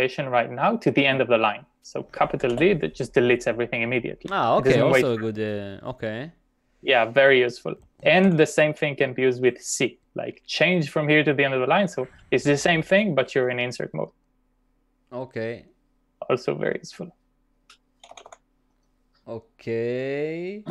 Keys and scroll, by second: 2.4 shift+d, 8.3 u, 12.6 shift+c, 17.8-18.8 typing.